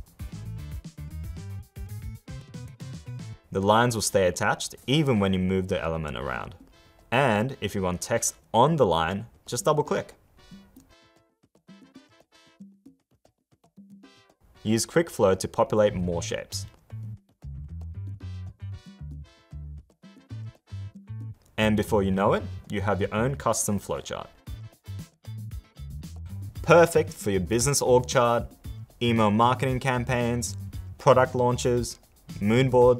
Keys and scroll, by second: 12.9 super+-.